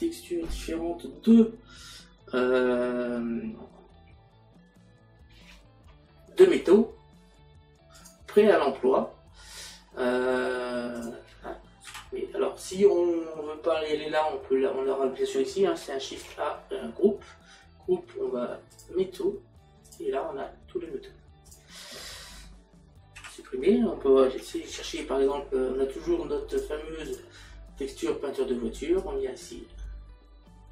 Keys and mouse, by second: 7.9 click, 11.0 click, 18.7 click, 19.9 click, 21.5 click, 26.5 click, 29.0 click.